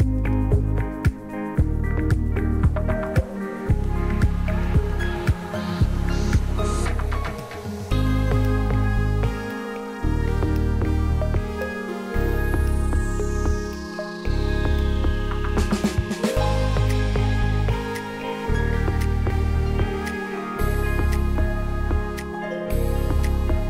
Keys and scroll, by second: 6.1 p, 8.1 \, 9.9 Delete, 12.4 Delete, 17.6 e, 20.3 ctrl+z, 22.5 \.